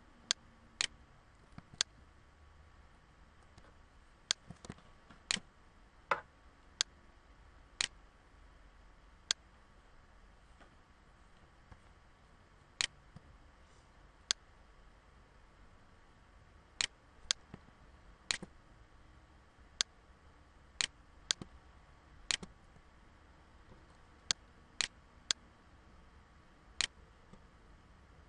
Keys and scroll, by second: 1.1 ctrl+z, 3.8 ctrl+z, 23.3 ctrl+-, 24.2 ctrl+-.